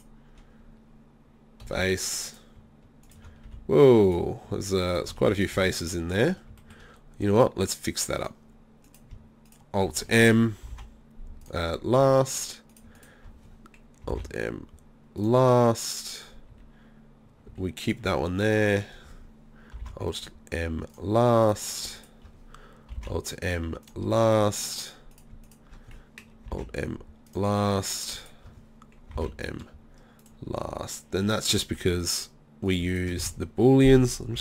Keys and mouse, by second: 1.7 f, 3.5 f, 5.2 f, 5.6 z, 8.2-9.6 right drag, 10.8 alt+m, 12.0 z, 14.2 alt+m, 16.5 z, 17.5 z, 17.9 right click, 19.9 alt+m, 21.5-23.9 drag, 23.0 alt+m, 24.2 middle click, 26.6 alt+m, 29.2 alt+m, 30.5 z, 33.2 z.